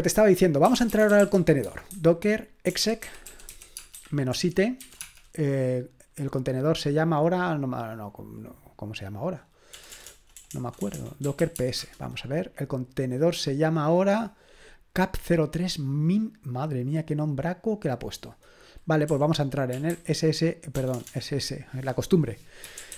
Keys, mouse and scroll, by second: 0.4-5.3 typing, 9.7-11.9 typing, 15.3-19.1 drag, 19.1-20.9 typing, 22.4-22.9 typing.